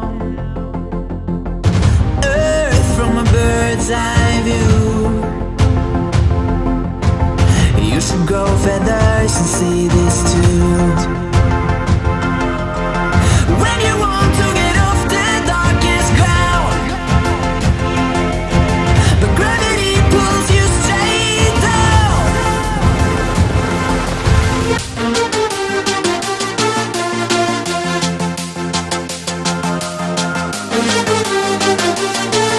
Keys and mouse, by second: 1.8 space, 2.0 click, 3.6 BackSpace, 4.0 space, 6.4 click, 9.4 space, 9.5 click, 9.7-10.3 space, 10.6 right click, 11.1 click, 15.5 F9, 16.2 click, 16.5 space, 16.8 click, 16.8-17.2 space, 17.5-18.0 click, 18.6-19.0 space, 19.4-20.3 click, 20.9 space, 21.5 ctrl+=, 21.9 space, 22.0-22.4 drag, 24.6 space, 24.8 click, 24.9 space, 25.5-28.4 drag, 28.6 Down, 29.0 Right, 30.5-32.5 drag.